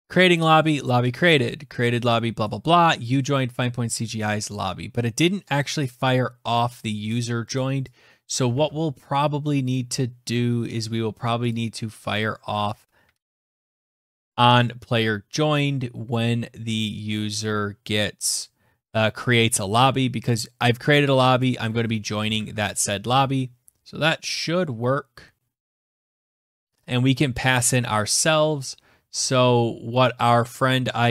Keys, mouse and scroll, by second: 0.5 click, 2.1 click, 4.0 click, 4.6-5.5 scroll, 6.7 click, 6.7 scroll, 7.2 click, 8.0 click, 8.2 alt+Tab, 11.2 click, 12.2 click, 12.8 ctrl+c, 15.4-16.4 scroll down 7, 17.3-17.7 scroll, 19.9 click, 20.4 click, 21.0 click, 21.8 Return, 22.0 ctrl+v, 22.7 ctrl+s, 25.9 click, 26.0 click, 28.3 scroll down 4, 28.4-29.7 scroll, 29.7 scroll.